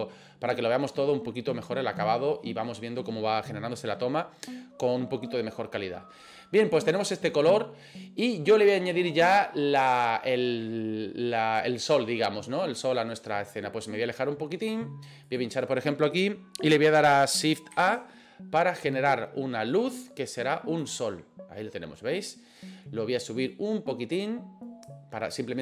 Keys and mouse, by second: 14.6 middle drag, 15.3 click, 17.7 shift+a, 23.5-24.9 drag.